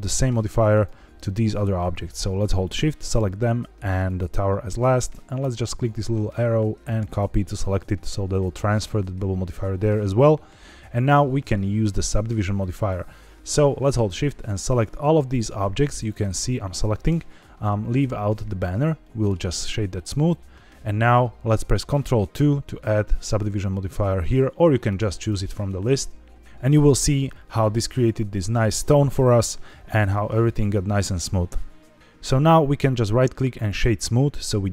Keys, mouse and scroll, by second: 0.6 click, 2.6 shift+click, 4.0 shift+click, 5.4-7.1 drag, 8.2 click, 10.3-11.2 scroll up 1, 14.1 shift+click, 14.6 shift+click, 15.3 shift+click, 15.9 shift+click, 18.9 middle click, 22.3 ctrl+2, 25.1 click, 30.1-32.0 scroll up 1, 32.8 right click.